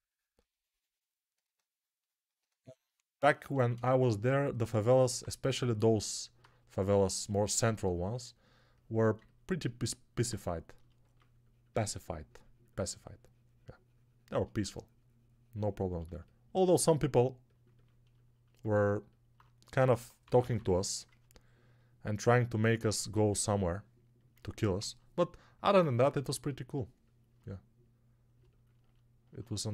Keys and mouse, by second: 19.7 g, 20.1 ], 20.3 ], 20.4 ].